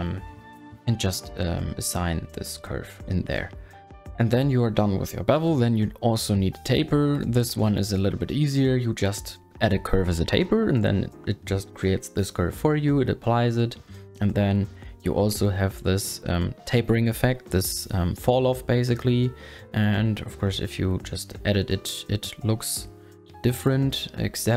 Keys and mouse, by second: 8.3-10.3 drag, 10.6 click, 10.9 click, 12.0 click, 14.0 click, 14.7 KP_1, 20.0 middle click, 20.8 click, 21.0 Tab, 21.5 click, 22.4 ctrl+a, 23.7 q.